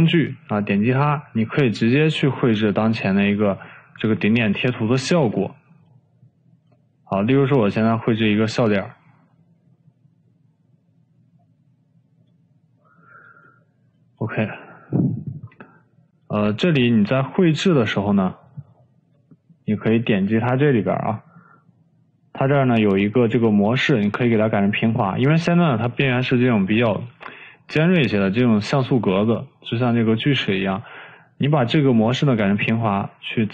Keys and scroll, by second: 5.3 ctrl+z, 16.8 ctrl+z.